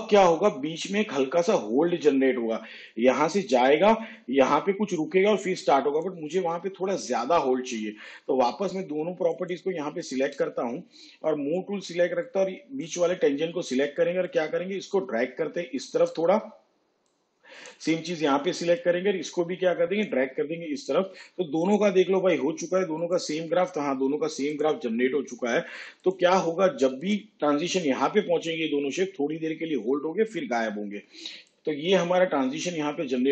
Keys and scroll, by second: 12.9 v.